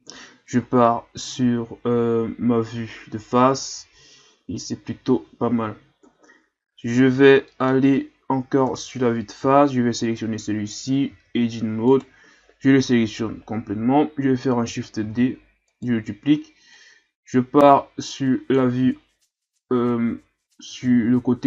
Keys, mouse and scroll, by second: 0.1 KP_1, 0.9-2.5 scroll down 5, 2.5-3.0 scroll up 2, 6.0 KP_Divide, 7.5-8.6 middle drag, 8.6 KP_7, 10.0 right click, 10.7-11.0 scroll up 2, 11.1 Tab, 11.9 right click, 12.9 l, 15.0 shift+d, 16.7-19.0 drag, 19.0-19.4 shift+scroll up 4, 19.4-20.3 ctrl+scroll down 4, 20.3-20.9 ctrl+scroll up 2, 20.9 shift+scroll down 1.